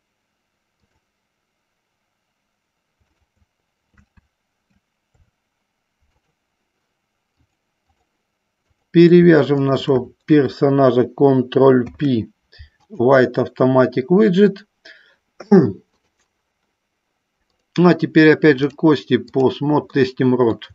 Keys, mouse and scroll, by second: 1.1 click, 3.2 shift+click, 5.3 Delete, 7.7 click, 9.0 click, 9.9 shift+click, 11.9 ctrl+p, 16.3 click, 17.6 click, 18.9 click, 20.4 middle click.